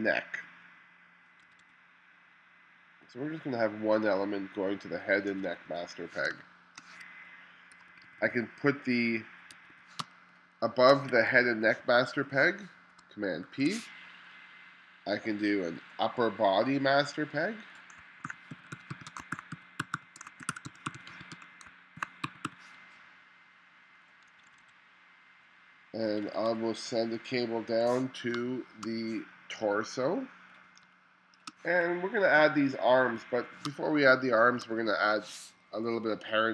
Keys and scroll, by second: 1.5 1, 5.3 1, 6.3 space, 7.9 2, 9.6 1, 10.0 space, 11.1 2, 13.5 super+p, 18.0-23.0 typing, 24.3 1, 26.1 1, 28.4 space, 30.9 space, 32.5 2, 33.7 space.